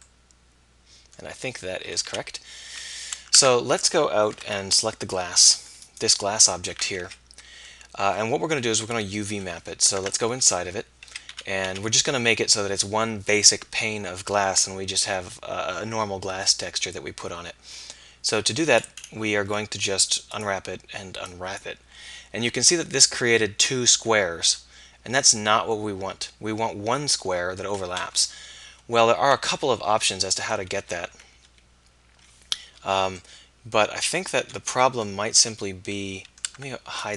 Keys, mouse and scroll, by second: 2.1 a, 2.7 a, 3.4 Tab, 4.3 alt+h, 7.1 z, 8.7 KP_1, 10.0 Tab, 10.4 z, 11.1 z, 11.3 a, 11.7 a, 24.8-26.5 middle drag, 28.2 KP_1, 28.8 KP_3, 29.7 KP_5, 30.0 KP_1, 31.1 ctrl+KP_1, 35.4 z, 36.7 Tab.